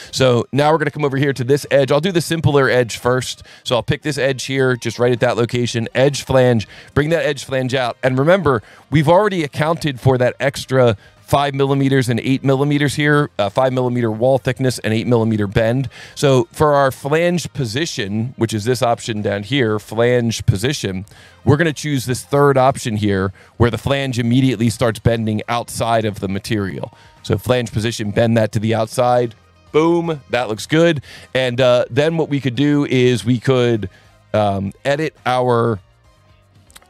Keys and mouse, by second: 3.6 click, 5.8 click, 7.1 click, 9.3 alt+1, 9.7 click, 10.4 click, 11.2 click, 11.9 click, 14.5 click, 14.9 click, 15.6 alt+1, 18.2 alt+1, 20.1 click, 21.0 click, 22.1 click, 24.5 alt+1, 27.3 click, 36.4 click.